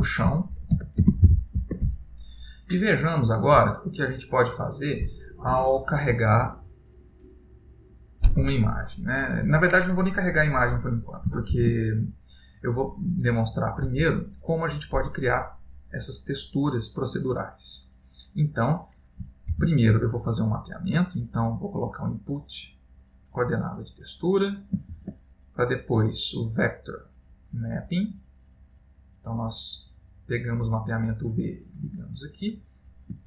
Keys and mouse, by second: 4.1 middle click, 11.7 shift+a, 20.1 shift+a, 25.2 shift+a, 30.6 click, 32.2 click.